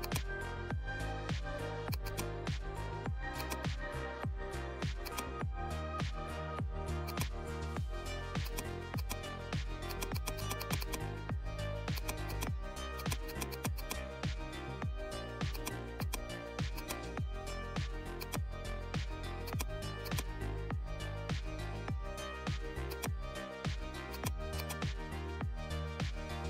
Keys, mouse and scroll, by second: 5.0 click, 6.9 click, 6.9 click, 7.5 right click, 8.3-12.9 drag, 15.5 click, 15.5 click, 18.3-26.4 drag.